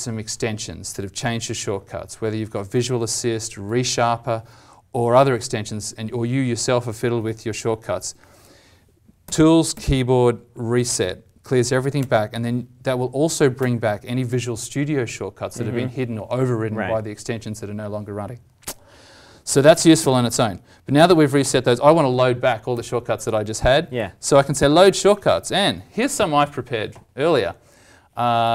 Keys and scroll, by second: 9.2 alt+t, 20.0 alt+t.